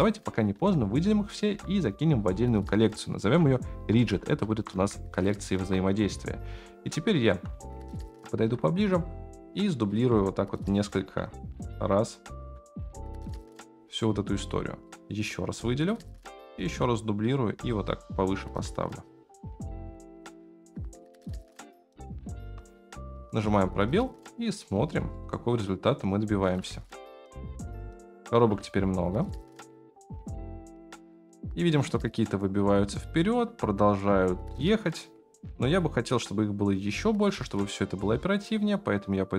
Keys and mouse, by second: 0.0 shift+click, 1.5 m, 4.8 Return, 5.6 KP_1, 6.8-7.2 shift+middle drag, 7.9 shift+middle drag, 8.4 shift+d, 8.9 r, 10.1 g, 11.0 shift+d, 12.6 r, 13.6 g, 14.8-16.3 drag, 16.6 shift+d, 17.5 r, 18.5 g, 20.1 click, 21.5 x, 22.4 KP_0, 23.2 space, 25.2-26.7 shift+middle drag, 26.9-28.2 shift+middle drag, 29.0 shift+middle click, 31.8-32.6 shift+middle drag, 37.4 space, 38.2-39.3 drag.